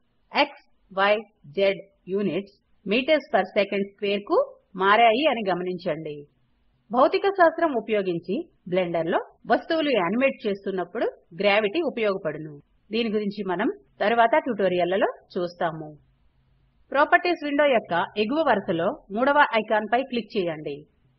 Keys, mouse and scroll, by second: 14.8 click.